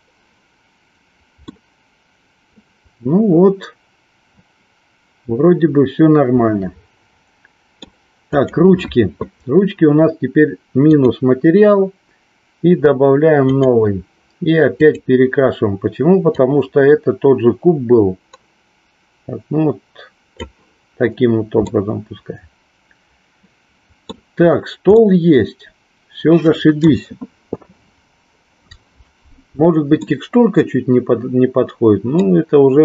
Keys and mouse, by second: 0.0 click, 1.7-8.1 middle drag, 8.5 click, 11.0 click, 13.3 click, 14.8 click, 21.7-24.1 middle drag, 25.1-27.0 middle drag, 30.0-32.3 middle drag.